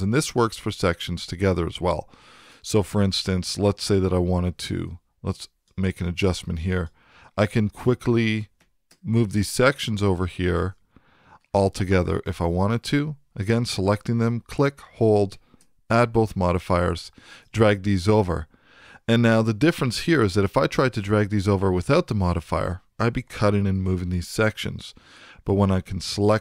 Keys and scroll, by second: 19.7 super+z, 23.9 super+z.